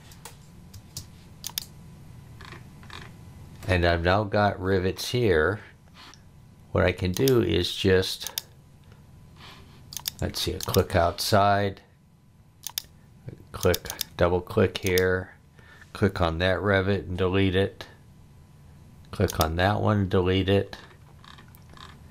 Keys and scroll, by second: 0.7 space, 16.6 Delete, 20.0 Delete.